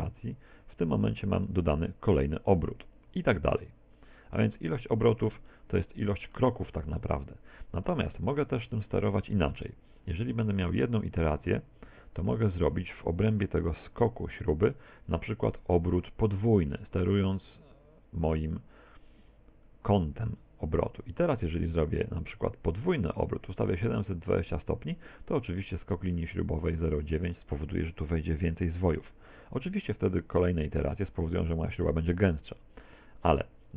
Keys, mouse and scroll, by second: 1.2 click, 3.0 click, 3.6 click, 4.2 click, 4.7 click, 5.4 middle click, 6.4 middle click, 7.0 middle click, 11.0 click, 11.4 click, 11.5 click, 11.9 click, 12.3 click, 17.0 click, 26.1 middle click, 30.7 click, 31.2 click, 31.7 click.